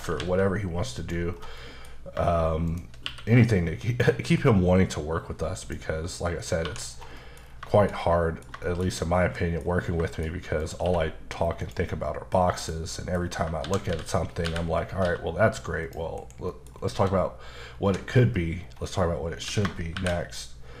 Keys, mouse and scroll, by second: 1.0 click, 1.3-1.6 scroll down 2, 1.6 middle click, 2.7 shift+click, 3.1 q, 5.6 click, 6.2 middle click, 6.7 1, 6.9 scroll down 2, 7.2 middle click, 7.7 shift+middle click, 8.6 shift+middle click, 9.6-10.6 scroll up 4, 10.1 shift+middle click, 10.6 click, 10.9 q, 11.6 click, 12.1 scroll down 1, 12.6 click, 12.9 middle click, 13.2 scroll up 2, 13.6-15.0 typing, 15.9 click, 16.2 KP_Decimal, 16.5 middle click, 16.7 scroll down 3, 17.0 s, 17.9 Escape, 18.6-19.5 scroll down 1, 19.5 s, 20.0 shift+y.